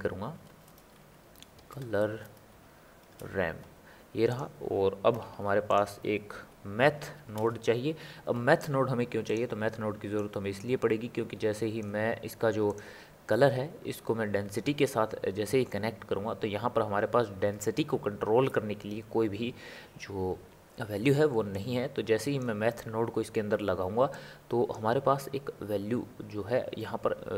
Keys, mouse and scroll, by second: 0.6 BackSpace, 5.3 shift+a, 10.4 click, 13.5 click, 21.7 click, 24.3 click.